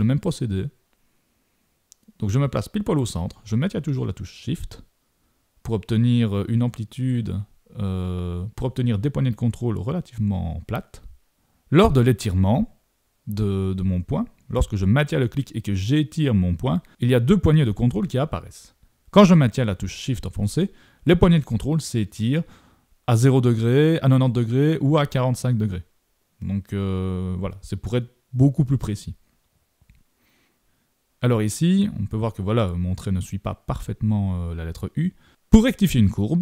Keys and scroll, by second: 0.9 super+-, 32.3 super+=.